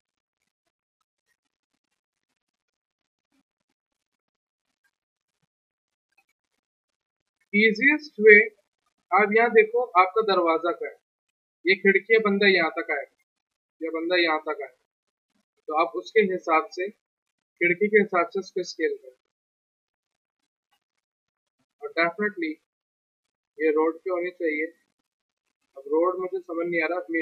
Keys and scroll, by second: 7.4 F3, 18.4 r, 20.2 w.